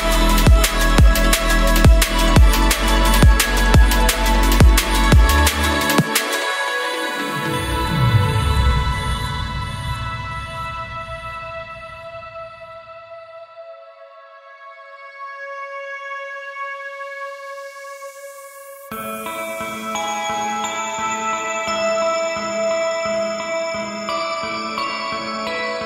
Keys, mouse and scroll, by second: 0.5 click, 1.0 middle click, 1.9 middle click, 3.5 middle click, 3.9 middle click, 5.0 Tab, 5.4 ctrl+l, 5.9 p, 7.7 click, 8.1 middle click, 9.6 click, 9.8 middle click, 10.4 alt+c, 10.8 alt+c, 11.4 ctrl+j, 12.2 Tab, 13.3-14.8 right drag, 14.8 middle drag, 15.6-16.2 middle drag, 16.2 ctrl+z, 17.4 ctrl+z, 19.2-22.1 middle drag, 22.2-23.2 middle drag, 23.7-24.8 middle drag, 25.0-25.8 middle drag.